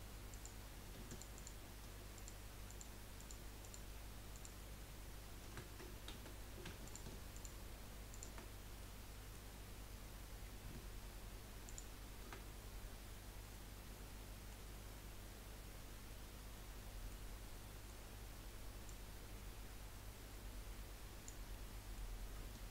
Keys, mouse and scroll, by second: 0.3 click, 1.1 alt+shift+click, 1.3 alt+shift+click, 2.1 alt+shift+click, 2.6 alt+shift+click, 3.2 alt+shift+click, 3.6 alt+shift+click, 4.3 alt+shift+click, 6.1 ctrl+z, 6.8 alt+shift+click, 7.3 alt+shift+click, 8.1 alt+shift+click, 8.5 scroll down 1, 8.8-9.9 middle drag, 9.9 scroll up 1, 11.6 alt+shift+click, 13.4-17.4 middle drag, 17.4 scroll up 1, 17.6-18.9 middle drag, 18.9 click, 21.5-22.7 middle drag.